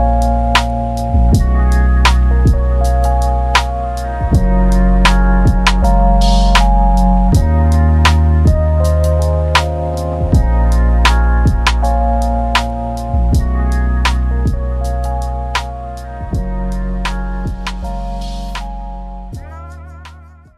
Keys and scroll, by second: 0.3-1.5 typing, 5.3 ctrl+z.